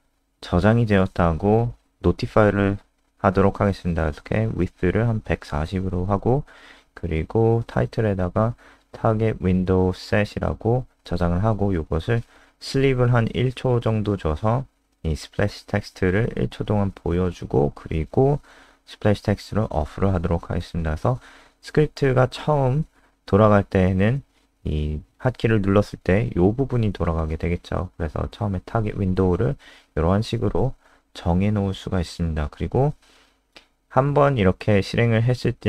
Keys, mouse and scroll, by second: 0.0 ctrl+Right, 0.7 Right, 1.0 BackSpace, 2.4 Left, 2.5 Left, 2.7-3.7 typing, 3.8 ctrl+Right, 3.9 ctrl+Right, 4.7 Right, 5.3 BackSpace, 7.0-10.0 typing, 10.2 Escape, 10.6 Return, 12.4-17.7 typing, 16.1 Escape, 16.3 Return, 17.9 Up, 18.2 Tab, 18.5 Escape, 18.7 Down, 18.9 ctrl+s, 19.8 Up, 20.0 Up, 20.3 End, 20.5 Return, 21.3 Escape, 21.3 typing, 21.6 ctrl+s, 25.2 F3, 26.5 click, 27.4 ctrl+alt+space, 29.7 click, 31.2 Down, 31.5 Return, 31.7 Up, 31.9 Return.